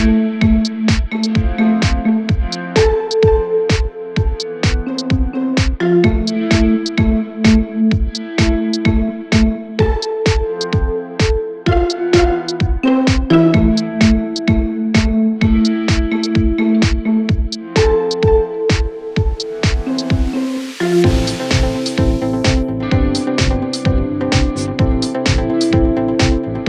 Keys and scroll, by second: 6.6 F3, 8.3 space, 12.8 F3, 14.8 space, 18.9 F3, 19.9 F3.